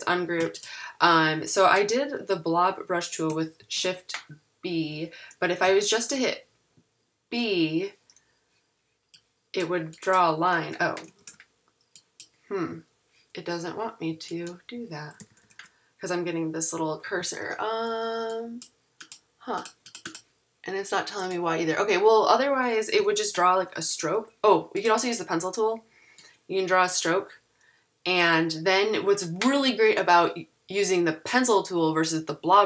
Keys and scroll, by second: 3.6 shift+b, 5.7 b, 11.2 x, 15.2 super+-, 23.0 super+=.